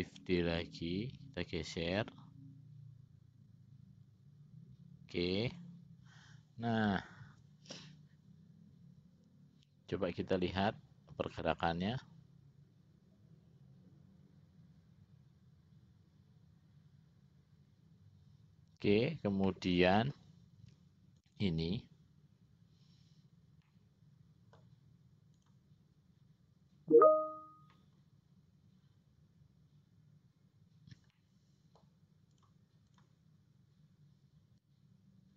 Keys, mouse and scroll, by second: 0.5 shift+d, 19.6 middle click, 21.4 click, 23.9-24.9 middle drag, 25.6 click, 31.3 middle click, 32.6 click, 33.1 click.